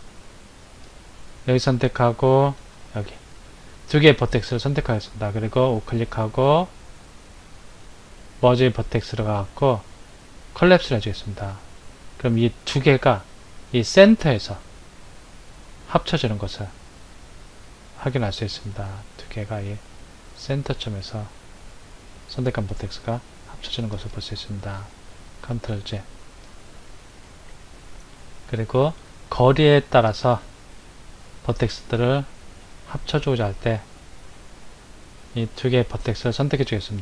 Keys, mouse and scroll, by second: 0.8 click, 2.7 shift+click, 5.4 right click, 24.1 ctrl+z, 26.2 click, 34.8 click, 36.7 right click.